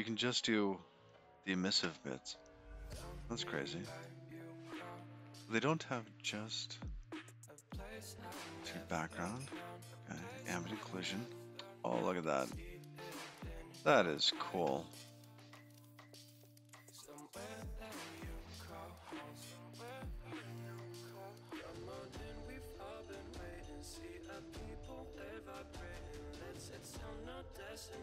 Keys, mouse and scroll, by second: 0.3-2.3 scroll down 3, 0.7 middle click, 3.6 click, 20.9-22.7 scroll down 27, 23.3-23.7 scroll down 5.